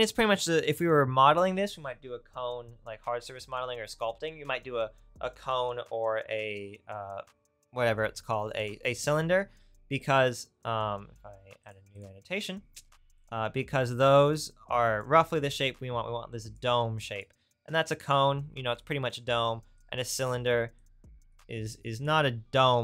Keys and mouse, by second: 13.2 click.